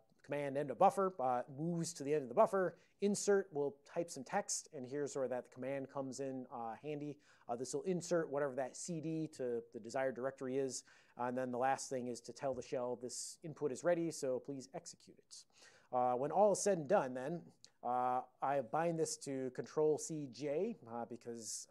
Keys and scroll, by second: 17.3 ctrl+x, 17.7 ctrl+s.